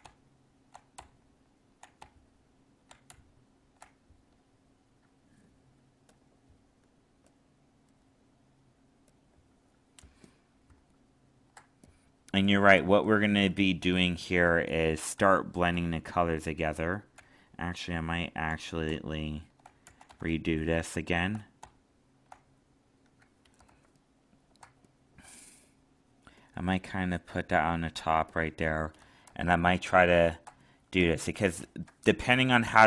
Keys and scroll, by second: 10.7 alt+space, 17.1 ctrl+z, 23.7 alt+space, 29.2 alt+space.